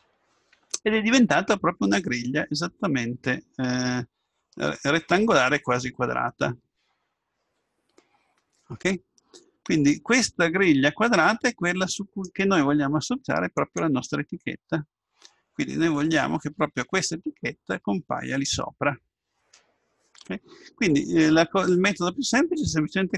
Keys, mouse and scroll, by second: 13.5 click.